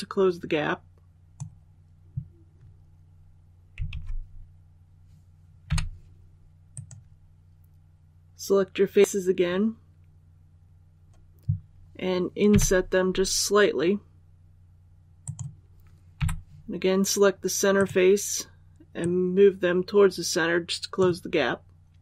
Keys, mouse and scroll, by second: 3.8 alt+a, 5.5 3, 6.6 right click, 12.4 i, 15.2 click, 16.1 click, 17.7 right click, 18.9-21.7 drag.